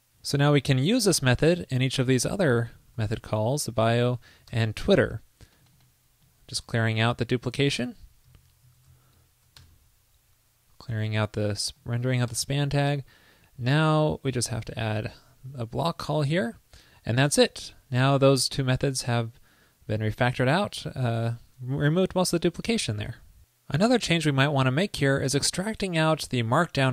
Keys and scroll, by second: 1.6 super+c, 3.1 super+v, 3.3 alt+Right, 3.4 alt+Right, 8.4 super+v, 8.8 super+Right, 9.1 alt+shift+Left, 23.2 super+s.